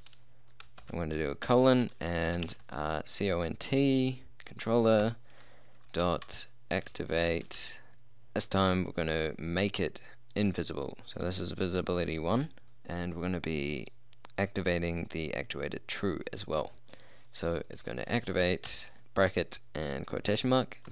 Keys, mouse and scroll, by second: 0.0 a, 0.0 l, 0.0 e, 0.9 shift+;, 1.5 Return, 2.4 c, 2.5 o, 2.5 n, 2.6 t, 5.1 ., 6.3-7.7 typing, 14.3-18.8 drag, 18.8 shift+9, 19.0 shift+'.